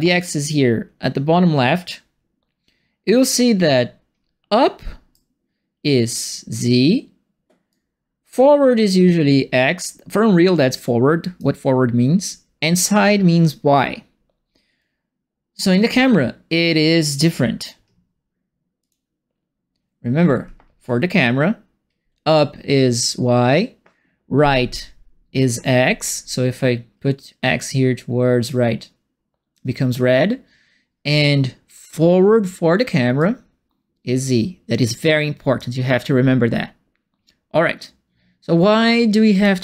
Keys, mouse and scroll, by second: 3.3-5.1 right drag, 7.6-11.3 right drag, 18.8 click, 27.7-29.5 drag, 33.2-35.5 drag, 38.9 click.